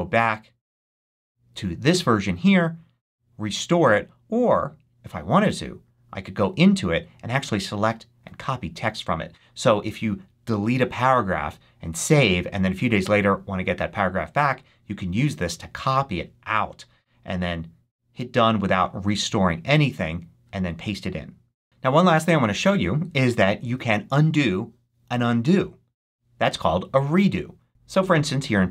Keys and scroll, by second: 27.6-28.7 typing.